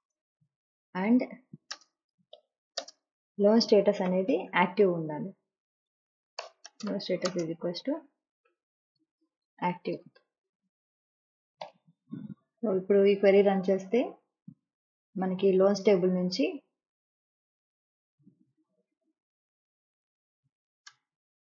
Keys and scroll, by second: 1.6-4.7 typing, 5.4 Down, 6.3 Return, 6.6-11.5 typing, 8.4 Left, 10.9 Right, 19.0-20.7 typing.